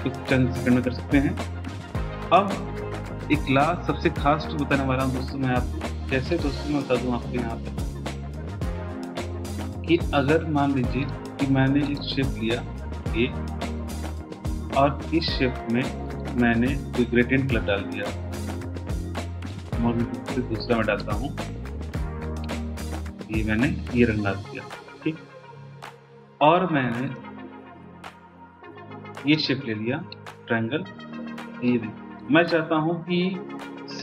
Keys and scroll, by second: 0.0 BackSpace, 1.4 BackSpace.